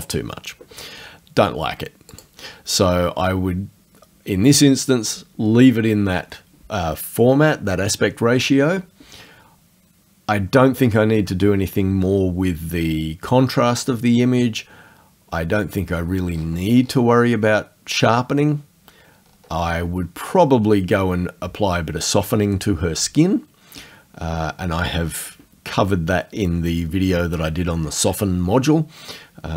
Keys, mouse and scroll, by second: 2.2 click, 16.3-17.1 scroll up 4, 19.7 scroll down 2, 20.3-20.6 scroll down 2.